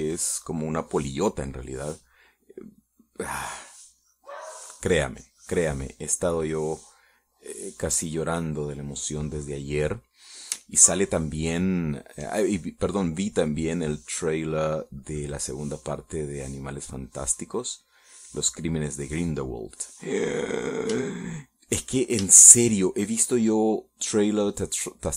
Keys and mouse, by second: 0.6-2.6 drag, 4.0-7.2 drag, 7.3-10.2 drag, 11.4 middle click, 12.0 shift+middle click, 12.6-14.0 shift+middle drag, 14.6-17.3 drag, 17.4-20.0 drag, 20.3 middle click, 21.0 middle click, 22.6 shift+middle click, 23.8 shift+middle click.